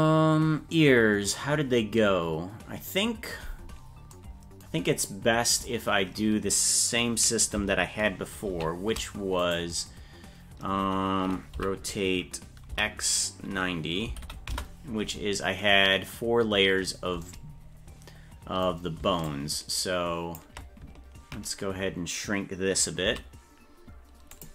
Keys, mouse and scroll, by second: 8.5 shift+d, 11.5 r, 19.2-20.3 ctrl+drag, 23.0 s.